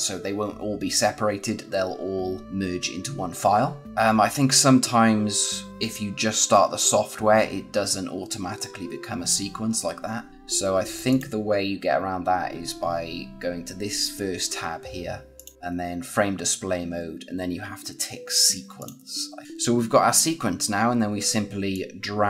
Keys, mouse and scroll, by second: 3.8 click, 11.0 click, 15.3 click, 18.7 click, 21.6 click.